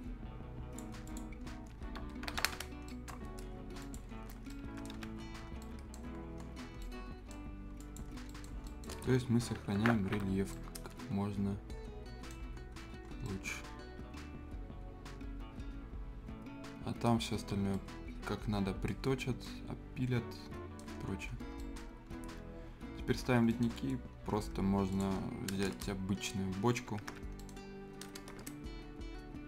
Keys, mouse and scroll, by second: 1.5 scroll down 1, 2.0 Escape, 2.6 scroll down 1, 2.9 right click, 3.8 click, 4.1 scroll down 1, 4.4 Escape, 4.5 right click, 4.6 Escape, 5.0 scroll down 1, 5.3 scroll up 1, 5.6 right click, 6.1 scroll down 1, 6.4 scroll up 1, 6.8 right click, 7.4-7.8 scroll up 1, 7.8 click, 8.1-8.6 scroll down 2, 8.3 right click, 8.6 right click, 9.1 Delete, 10.0 alt+r, 10.5-12.4 right drag, 12.6 scroll up 1, 13.2-17.2 right drag, 17.2 scroll up 1, 17.7-19.0 right drag, 19.0 scroll up 1, 19.4-20.8 right drag, 20.8 scroll down 1, 21.5 right click, 21.9 scroll up 1, 22.4 scroll up 1, 23.2 scroll down 1, 23.5 right click, 23.8-24.1 scroll up 1, 24.9 click, 25.1-25.9 scroll down 1, 26.0-26.4 scroll up 1, 26.4 scroll down 1, 26.6-26.9 scroll up 1, 26.9 Escape, 27.2 scroll up 1, 27.4 right click, 28.8 scroll down 1.